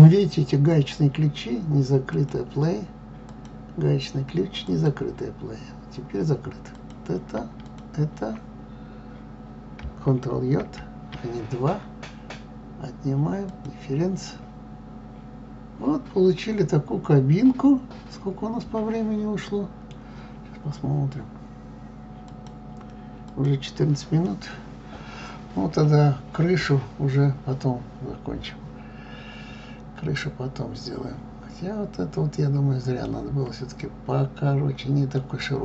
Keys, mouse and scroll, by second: 0.8 click, 2.1-7.5 drag, 10.6 ctrl+j, 13.5 click, 14.2-15.2 middle drag, 15.3-17.2 middle drag, 24.3-27.3 middle drag, 34.5-35.1 scroll up 1, 35.1-35.6 middle drag.